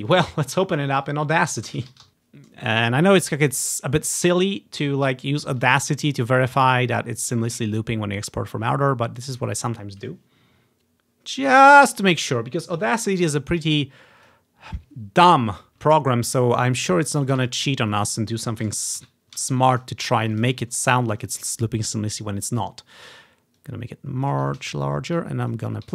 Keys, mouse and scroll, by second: 0.2-2.1 drag, 1.6-2.6 typing, 3.2-4.5 drag, 5.6 typing, 6.6-7.7 drag, 12.0-14.4 drag, 15.8 click, 17.1 click, 17.6 click, 17.8-20.0 drag, 20.3-21.7 ctrl+drag, 23.7-25.4 ctrl+drag, 25.6 ctrl+click.